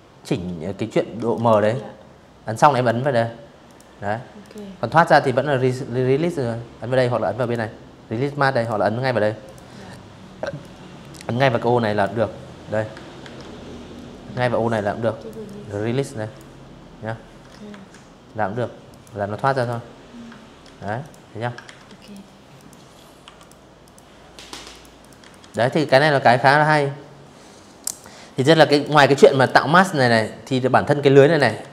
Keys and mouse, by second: 0.4 click, 1.3 click, 2.1 click, 5.1 click, 6.2 click, 7.1 click, 8.2-9.7 drag, 10.9 ctrl+1, 12.4 ctrl+click, 13.1 ctrl+click, 15.3 Escape, 16.5 click, 17.1 v, 17.2 click, 18.3 ctrl+z, 18.7 click, 19.3 ctrl+z, 19.7 click, 20.2 click, 20.9 Delete, 21.0 click, 21.5 click, 22.4 click, 22.6 click, 22.9 z, 23.0 click, 23.2 v, 23.4 click, 25.5 click, 26.2 z, 26.3 click, 26.5 space, 26.6 click, 26.9 v, 28.7 z, 29.1 v, 29.4 click, 29.8 click, 30.3 space, 30.4 click, 30.7 v, 30.7 click, 31.2 click.